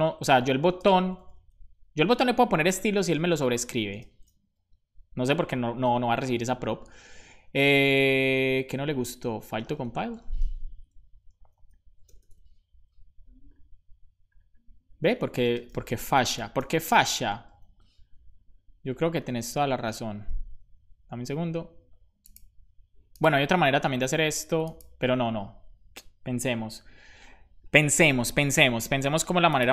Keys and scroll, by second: 0.7 space, 0.9 Left, 1.0 Left, 1.2 super+s, 3.2 shift+[, 3.8 space, 9.6 BackSpace, 10.6 super+s, 10.6 Right, 12.3 super+s, 15.2-17.0 typing, 17.5 super+s.